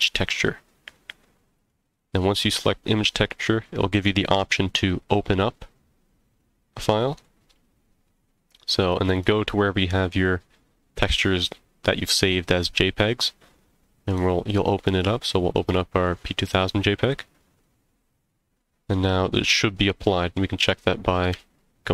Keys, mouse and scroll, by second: 5.1 click, 20.3-20.7 middle drag, 21.3 z.